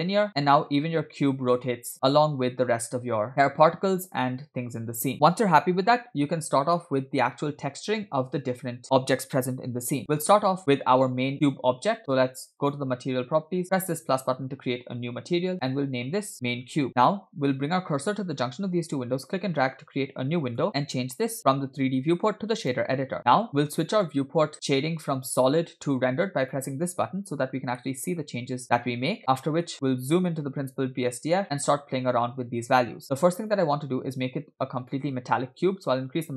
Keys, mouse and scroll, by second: 0.6 space, 5.8 space, 12.7 click, 14.3 drag, 16.6-17.7 shift+drag, 19.3-22.8 drag, 23.9-24.5 scroll down 1, 27.0-27.8 drag, 27.8 middle click, 29.4 middle click, 29.7-30.1 scroll up 4, 30.3-30.7 scroll up 2, 31.0 middle click, 31.4-32.6 scroll up 1, 33.5-34.9 drag.